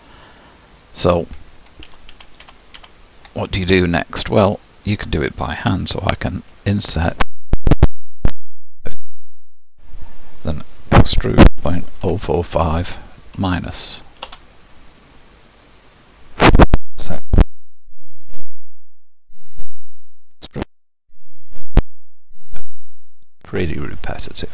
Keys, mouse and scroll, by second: 1.9 ctrl+z, 2.1 ctrl+z, 2.4 ctrl+z, 2.7 ctrl+z, 11.1 e, 20.4 e.